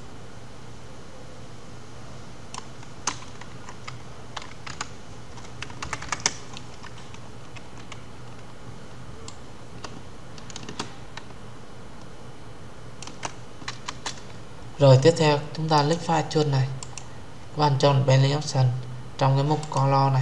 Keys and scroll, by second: 13.6 Return.